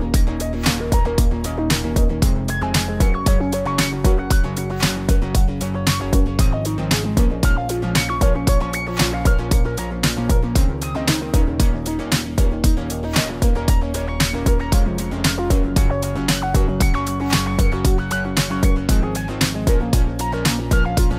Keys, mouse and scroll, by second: 0.1 click, 0.5 click, 1.0 click, 1.1 click, 1.6 click, 1.9 click, 2.4 click, 3.4 click, 4.0 middle click, 4.5 Tab, 4.8 click, 4.9-5.5 scroll up 4, 4.9 shift+middle click, 5.1 middle click, 5.5-5.9 scroll down 3, 6.3 shift+middle click, 7.0 shift+middle click, 7.0 middle click, 7.3 middle click, 7.5 scroll up 2, 7.6 shift+middle click, 7.7 click, 8.0 shift+click, 8.2 click, 8.3 shift+click, 9.3 m, 9.9 click, 10.0 shift+middle click, 10.4 shift+middle click, 10.4 scroll up 1, 10.7 click, 10.7 click, 10.9 click, 10.9 shift+click, 11.0 shift+click, 11.2-11.8 shift+click, 11.5 shift+click, 11.9 m, 12.3 click, 12.4 shift+middle click, 13.1 shift+middle click, 13.4 click, 13.5 shift+middle click, 13.6 shift+click, 13.8 click, 14.3 m, 15.2 scroll down 2, 15.4 shift+middle click, 15.6 click, 15.8 click, 15.8 shift+click, 15.9 shift+click, 16.1 click, 16.3 m, 18.8 click, 19.7 middle click, 20.2 shift+middle click, 20.4 click, 20.6 click, 20.8 click, 20.9 shift+click, 21.1 shift+click.